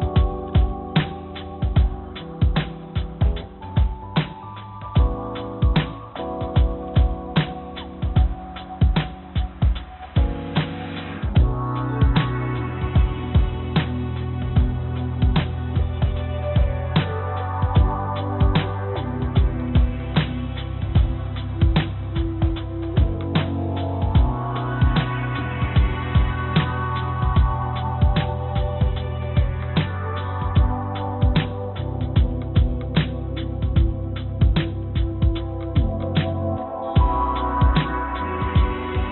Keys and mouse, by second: 0.2 click, 0.8 click, 1.1 click, 5.2 g, 8.4 s, 10.4 g, 24.3 s, 26.6 g, 30.1 middle click, 31.8 g, 32.3 s, 33.6 right click, 35.7 g.